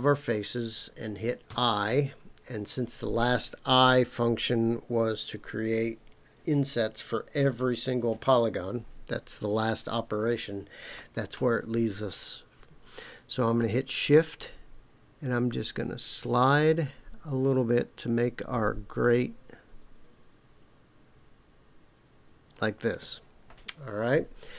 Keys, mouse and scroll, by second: 1.5 i, 22.5 shift+click.